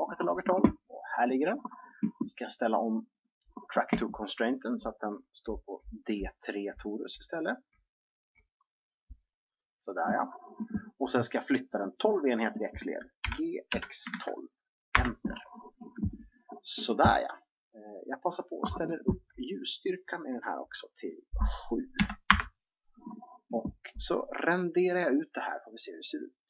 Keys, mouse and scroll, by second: 3.0-6.3 drag, 13.2 g, 18.3-22.8 drag.